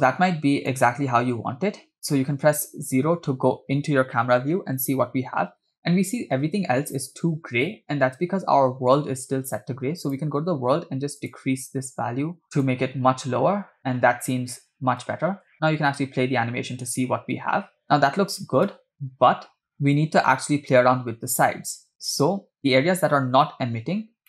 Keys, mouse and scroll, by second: 0.1-0.8 shift+middle drag, 1.2 scroll up 1, 2.4 KP_0, 10.0 click, 11.2 click, 12.4 click, 15.2 space, 18.9 space, 19.7 space, 22.0 middle click, 22.0 scroll down 3, 24.0 scroll up 3.